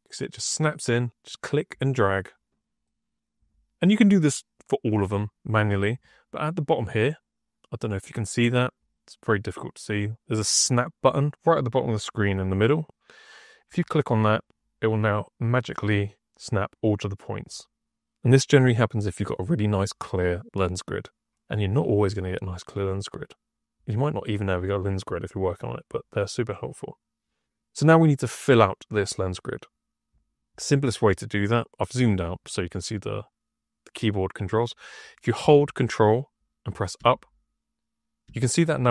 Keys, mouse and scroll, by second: 1.2 click, 2.7 click, 13.6 click.